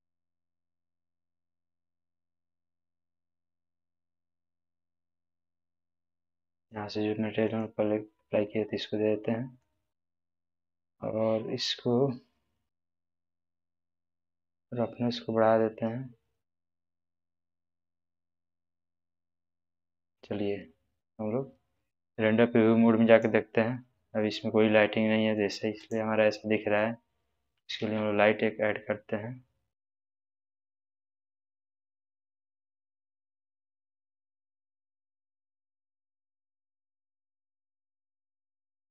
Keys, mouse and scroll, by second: 8.6-9.8 middle drag, 11.6 scroll down 1, 14.5-16.7 drag, 17.4-20.2 middle drag, 23.0 click, 24.2-25.4 middle drag, 25.8 click, 26.3-26.9 middle drag, 27.8 shift+a, 30.2 click, 33.2-33.9 typing, 35.6-36.3 drag, 37.2 z, 37.6 z, 37.9 z.